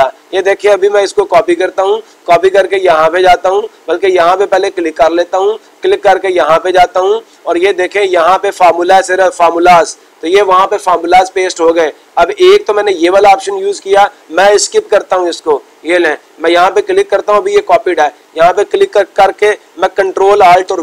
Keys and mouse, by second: 5.0-6.1 drag, 6.9-8.0 drag.